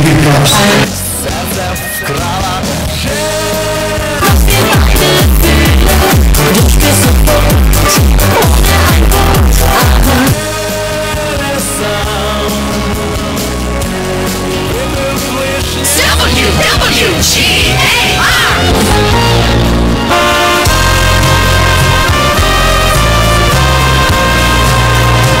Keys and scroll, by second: 0.9 Page_Down, 10.3 Page_Down.